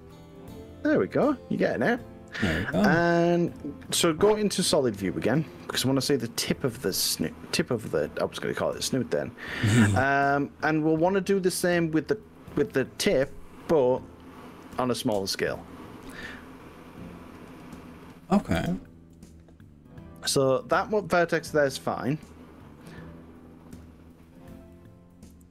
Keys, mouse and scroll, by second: 7.0 z, 18.6 click, 21.4 KP_3, 23.8 click, 24.7-25.5 middle drag.